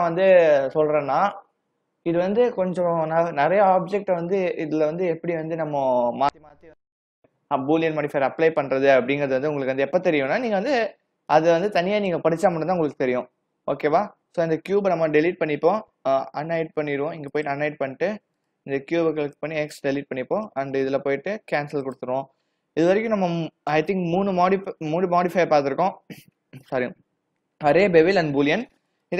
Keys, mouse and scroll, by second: 11.4 click, 17.4 click, 18.4 click, 19.3 x, 20.5 click, 21.9 click, 25.2 click.